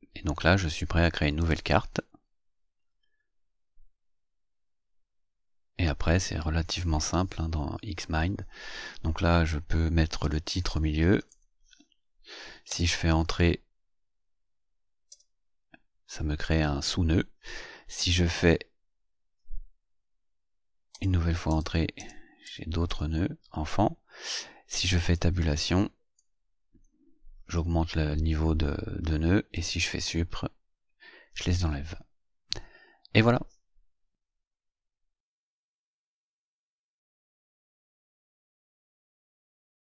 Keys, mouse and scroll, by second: 1.3 click, 10.1-11.7 typing, 12.6 Return, 15.0 Return, 20.8 Return, 25.0 Tab, 29.4 Delete.